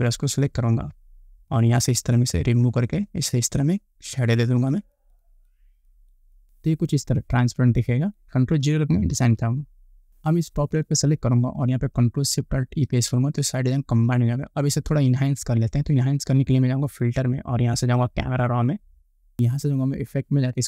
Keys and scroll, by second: 9.4 ctrl+0, 13.1 ctrl+alt+shift+b.